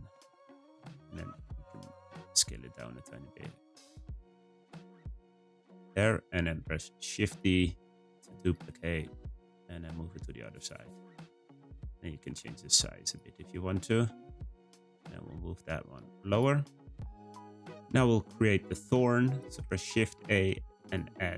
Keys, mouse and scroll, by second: 0.6 Tab, 0.9 a, 1.0 s, 2.0 Tab, 2.4 g, 6.6 shift+d, 9.0 r, 10.8 g, 11.8 Tab, 12.0 a, 12.2 s, 13.2 Tab, 13.8 g, 16.2 click, 16.6-17.5 scroll down 2, 17.5-18.2 middle drag, 18.2-18.6 scroll down 2, 18.6-19.5 middle drag, 19.5 shift+a.